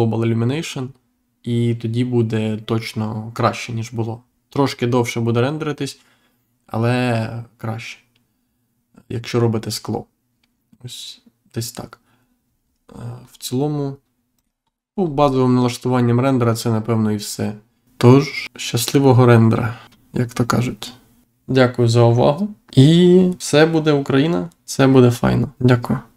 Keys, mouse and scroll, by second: 12.5 scroll down 1, 13.2-13.5 scroll down 1, 14.3 click, 14.7 scroll down 1, 16.0 scroll up 1, 16.9 scroll up 1, 18.9-19.3 scroll up 1.